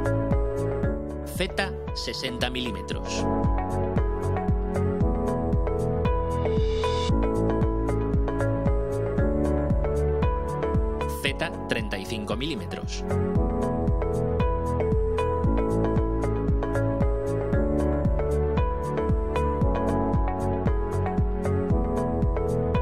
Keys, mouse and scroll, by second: 1.5 click, 2.9-3.8 typing, 3.9 Return, 4.7-5.1 drag, 6.4 click, 9.7 click, 11.3 3, 11.8 5, 12.5 Return, 14.5-15.7 drag, 15.9-16.5 scroll down 1, 16.5 right click, 17.3 scroll up 1, 18.5-19.0 scroll up 4, 20.1-22.8 drag.